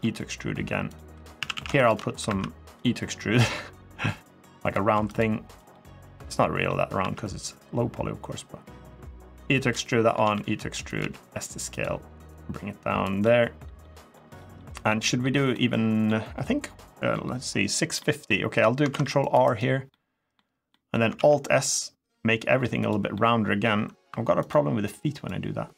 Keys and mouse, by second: 0.6 click, 0.9 3, 1.1 a, 1.3 a, 1.6 alt+shift+click, 2.0 alt+e, 4.4 click, 4.7 3, 5.2 click, 5.5 middle click, 6.3 click, 6.8 e, 9.3 click, 10.1 e, 10.6 click, 10.7 s, 11.5 click, 12.1 click, 13.0 middle click, 13.6 middle click, 14.1 middle click, 14.6 middle click, 15.3 middle click, 17.7 middle click, 18.7 ctrl+r, 19.3 right click, 19.7 middle click, 20.5 middle click, 20.9 alt+s, 22.5 click, 22.9 middle click, 23.8 2, 24.2 click, 25.1 click.